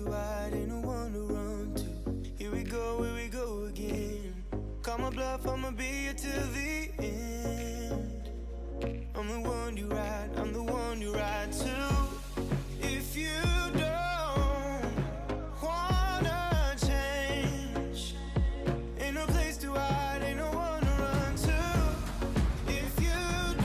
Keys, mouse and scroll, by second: 0.6 s, 3.2 g, 5.7 shift+middle click, 5.9-6.4 scroll up 5, 6.4 z, 7.0 s, 8.4 s, 10.7 s, 11.5 g, 14.5-15.0 scroll down 3, 15.0 KP_3, 15.3 shift+middle click, 15.6 s, 16.7-17.1 scroll up 5, 17.1 s, 19.1 scroll down 7, 19.4-20.3 middle drag, 20.3-20.6 scroll down 3, 20.6-21.9 middle drag, 21.9 g, 23.1 r.